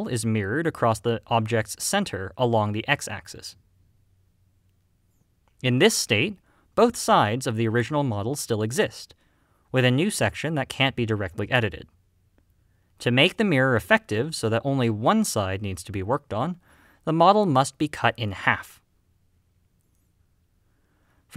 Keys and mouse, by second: 0.0 click, 1.1-7.2 middle drag, 8.0 middle click, 8.7 alt+click, 9.1 g, 9.7 right click, 10.8 alt+click, 11.2 middle click, 11.4 g, 13.4-14.1 right drag, 14.1 click, 14.7 click.